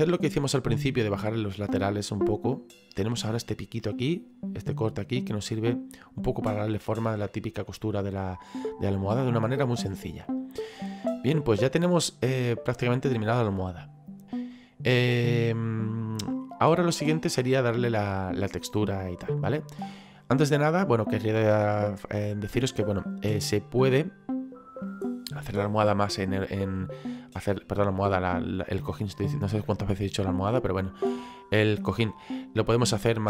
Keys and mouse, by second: 4.0 middle click, 5.2 middle click, 7.3 middle click, 9.9 middle click, 25.5 middle click.